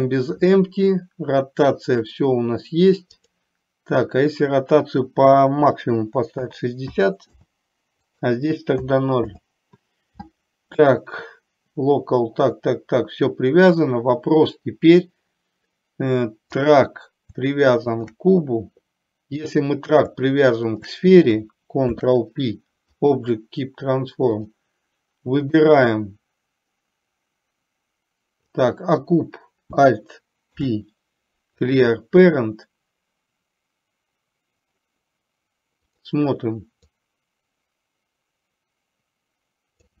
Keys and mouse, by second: 3.3-7.5 drag, 8.3-9.5 drag, 16.6 click, 20.8 shift+click, 22.0 ctrl+p, 25.7-28.7 drag, 30.5 alt+p, 36.0 click, 36.8-40.0 drag.